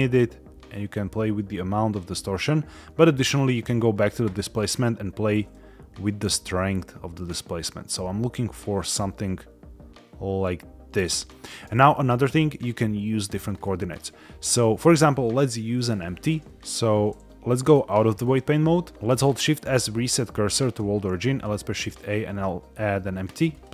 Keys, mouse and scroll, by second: 3.4 click, 4.6-11.2 drag, 13.4 scroll down 2, 13.9-14.5 middle drag, 15.9 shift+middle click, 16.5 Escape, 16.5 Tab, 16.5 scroll up 1, 17.5-18.3 drag, 18.9 shift+a, 19.1 shift+s, 21.1 shift+a.